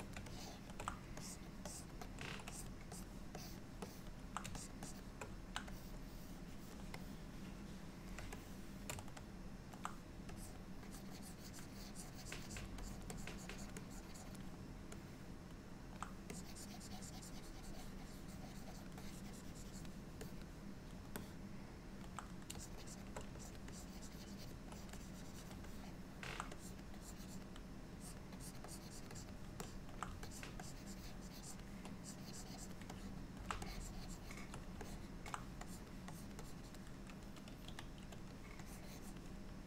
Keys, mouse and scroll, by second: 0.3 shift+middle click, 1.3 ctrl+click, 1.7 ctrl+click, 2.1 ctrl+click, 2.6 click, 3.0 click, 3.4 click, 3.9 click, 4.6 shift+click, 4.9 shift+click, 5.8 click, 6.2 click, 7.1 middle click, 8.4 shift+middle click, 9.3 middle click, 10.4 click, 11.0 click, 11.2 click, 12.9 click, 13.2 click, 13.4 click, 13.6 click, 13.8 click, 14.1 click, 15.0 middle click, 16.4 click, 19.1 click, 19.1 click, 20.3 click, 21.3 middle click, 22.7 shift+click, 22.9 shift+click, 23.5 ctrl+click, 23.8 ctrl+click, 24.3 ctrl+click, 24.8 click, 25.1 click, 25.7 middle click, 26.6 click, 27.1 click, 27.3 click, 28.1 click, 28.4 click, 28.8 click, 29.2 click, 29.7 middle click, 30.3-30.7 ctrl+click, 30.7 click, 32.1 click, 32.3 click, 33.0 middle click, 33.7 click, 34.9 middle click, 35.7 click, 36.2 click, 36.3 ctrl+click, 36.5 click, 36.7 ctrl+click, 37.7 f, 38.7 click.